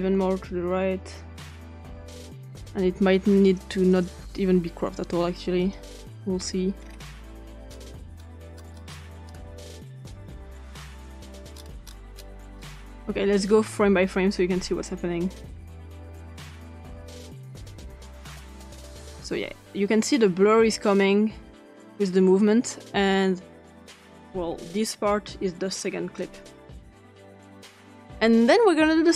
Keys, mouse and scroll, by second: 3.5 click, 3.9 click, 5.6 click, 6.8 scroll down 2, 7.5 click, 7.6-9.2 scroll down 6, 9.2-9.7 scroll up 2, 10.2-10.6 drag, 11.2 click, 11.5-12.5 scroll up 5, 12.5 scroll down 2, 13.3 click, 15.4 Right, 15.8 Right, 16.0 Right, 16.4 Right, 16.9 Right, 17.4 Right, 17.7 Right, 18.4 Right, 20.5 Right, 21.1 Right, 21.7 Right, 22.5 Right, 26.8 Right, 27.5 Tab.